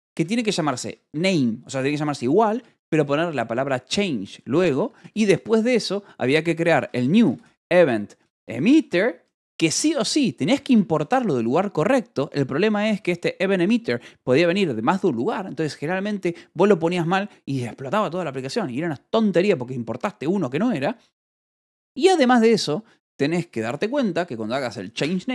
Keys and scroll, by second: 0.0-3.5 typing, 4.8-11.5 typing, 9.7 Escape, 12.2 Escape, 12.7-13.5 typing, 18.3 Escape, 21.3 o, 21.5 Return.